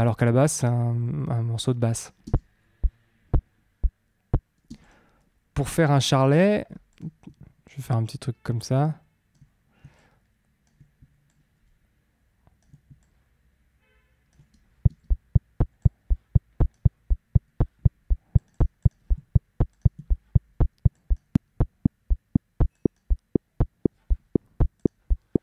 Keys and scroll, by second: 2.2 space, 4.6 space, 6.1 super+t, 14.8 space.